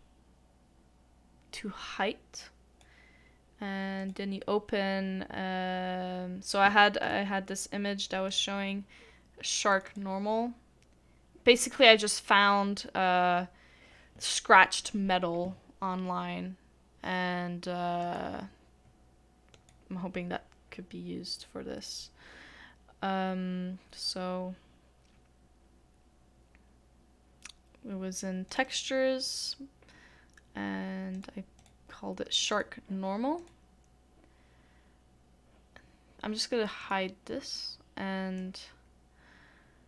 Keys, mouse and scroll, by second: 9.8 Return, 9.8 double click, 28.6 double click, 37.5 double click.